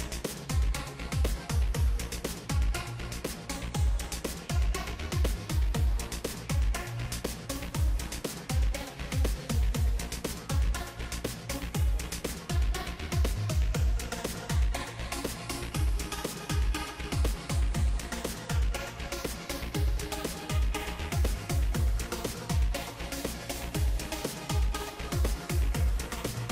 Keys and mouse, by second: 0.2-2.7 right drag, 1.3 ctrl+z, 1.6 f, 1.9 f, 2.1 f, 2.5 ctrl+z, 4.1 ctrl+s, 5.0 z, 5.9 z, 6.1 Tab, 6.9 middle click, 9.2 Tab, 9.8 KP_1, 11.6-15.1 drag, 13.3-14.8 right drag, 15.1 ctrl+s, 15.7 middle click, 17.3 click, 18.4 ctrl+z, 19.0-20.7 drag, 19.0 right click, 20.4 ctrl+s, 24.6-26.4 right drag.